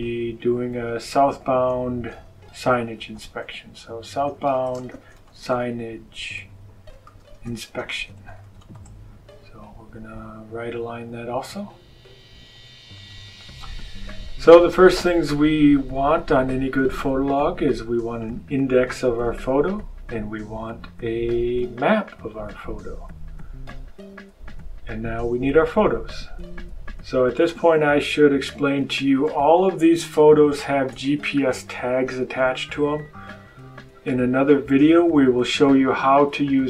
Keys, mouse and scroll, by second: 0.3 click, 1.8-9.1 typing, 10.6 click, 12.9 click, 18.1 click, 21.5 click, 27.4 click, 30.4 shift+click.